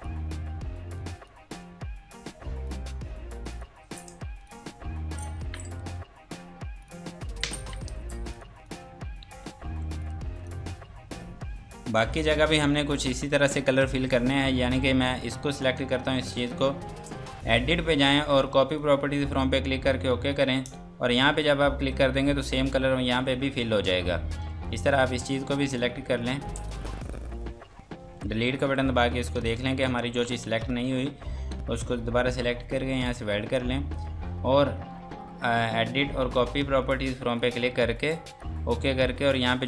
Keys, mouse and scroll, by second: 9.2 F3, 10.0 click, 12.9 F2, 13.4 click, 17.4 click, 24.0 scroll down 1, 24.3 F2, 24.6 click, 25.1 Escape, 25.7 click, 26.6 shift+click, 27.0 shift+click, 28.6 Delete, 29.6 z, 31.5 ctrl+space, 33.1 click, 36.4 click.